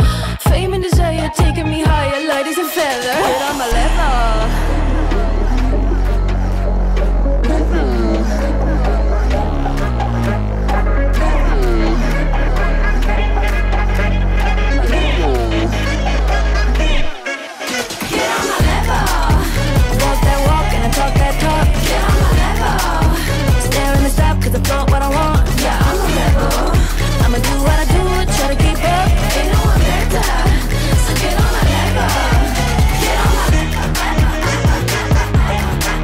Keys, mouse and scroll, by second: 0.0-0.1 typing, 1.2 ctrl+a, 2.1 shift+r, 3.5 click, 4.6 Return, 7.1 shift+g, 7.3 click, 8.3 ctrl+d, 9.6 Return, 10.0 shift+b, 10.6 click, 17.8 click, 26.4 =, 26.6 =, 26.6 =, 27.4-28.4 drag, 27.4 =, 29.8-30.8 drag, 35.5 shift+click.